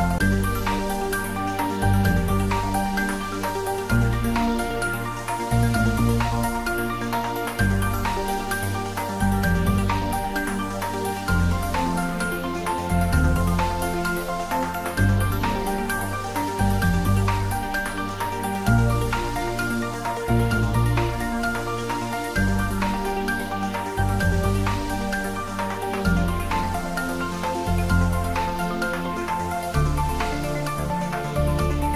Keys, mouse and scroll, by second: 3.9 click, 4.2-5.1 scroll down 1, 6.5-9.1 typing, 11.6 click, 12.9 g, 13.5 y, 14.8 g, 16.1 click, 16.8 middle click, 18.3 3, 19.0 scroll up 1, 19.9 middle click, 22.1-24.0 drag, 24.0 scroll down 1, 24.6 shift+middle click, 25.6-26.0 scroll up 1, 26.5 scroll down 1, 27.0 middle click, 28.1-29.2 typing.